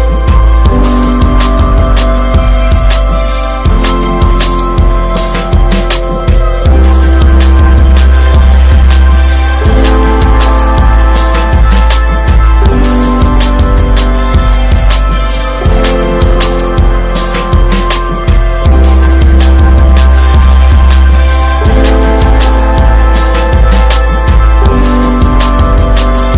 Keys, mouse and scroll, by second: 5.0-6.4 middle drag, 5.0 scroll down 2, 6.4-9.8 drag, 11.3-17.7 drag, 17.7 scroll down 3, 17.8 middle click, 18.0 scroll up 3, 18.3 ctrl+s, 19.2-21.6 drag, 21.6-24.6 shift+middle drag, 24.6-26.3 drag.